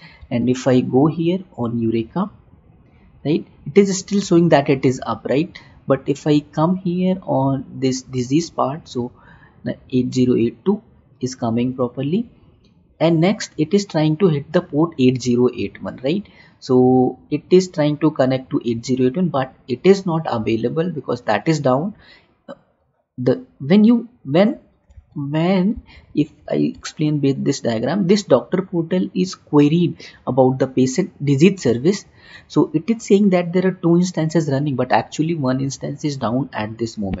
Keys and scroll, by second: 25.3 alt+Tab, 27.2 Tab.